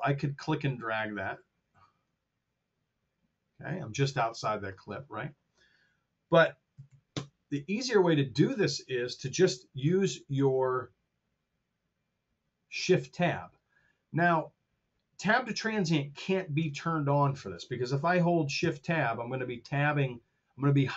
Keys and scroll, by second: 6.4 KP_Multiply, 6.7 KP_3, 6.8 KP_1, 7.0 Return.